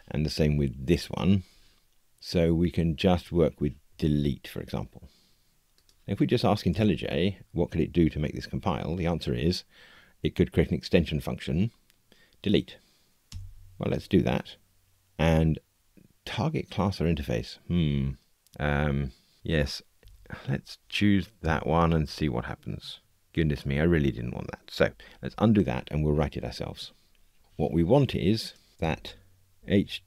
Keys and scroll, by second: 6.6 alt+Return, 25.1 super+z.